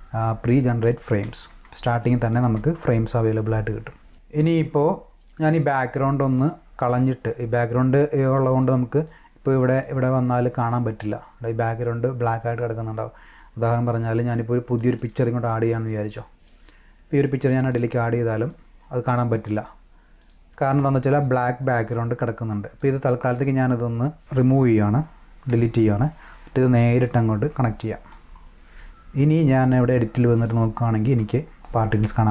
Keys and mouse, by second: 1.0 space, 1.5 space, 2.0 click, 2.4 space, 3.5 space, 3.8-4.9 drag, 6.4 click, 8.6-9.0 drag, 9.7 click, 13.4-13.9 drag, 14.8 click, 15.0 click, 16.4-17.7 drag, 18.4 click, 20.2 click, 21.8 click, 22.8 click, 23.3 click, 27.1-28.1 drag, 30.3 click, 31.2 space.